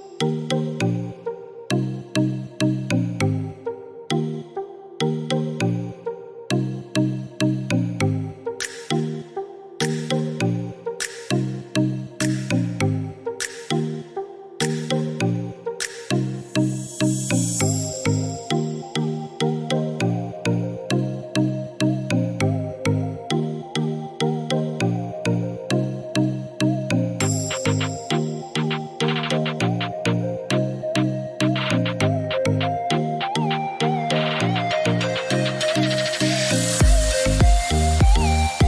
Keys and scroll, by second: 9.4 3, 10.1 8, 10.9 Return, 14.6-15.7 typing, 17.0 Escape, 33.5 8, 33.8 Return, 37.8 8, 38.2 Return.